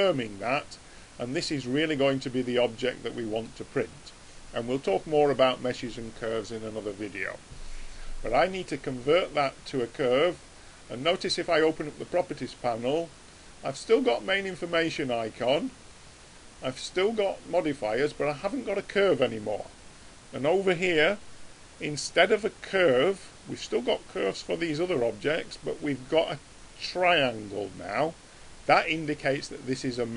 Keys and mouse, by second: 8.2-11.3 middle drag, 11.3-14.8 drag, 16.9 click, 20.1-28.4 middle drag.